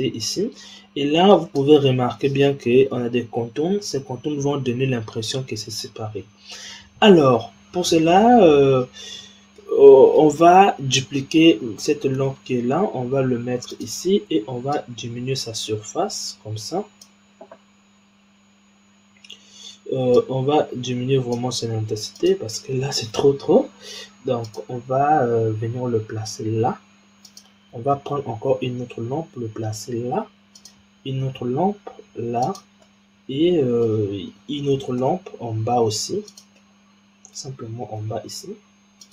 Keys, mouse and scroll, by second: 6.4-9.4 scroll down 1, 9.5-10.4 middle drag, 10.4-12.2 scroll down 4, 12.2 shift+d, 14.7-17.7 drag, 20.1-22.2 drag, 24.3 click, 26.0 g, 28.0 shift+d, 31.3 shift+d, 32.8-35.0 middle drag, 35.0 shift+d, 36.5-37.9 middle drag, 37.9 g.